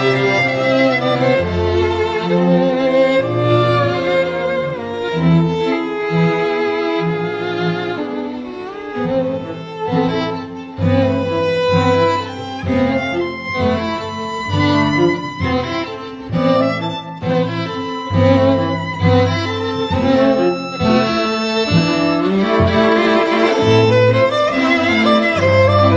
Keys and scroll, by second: 3.7 e.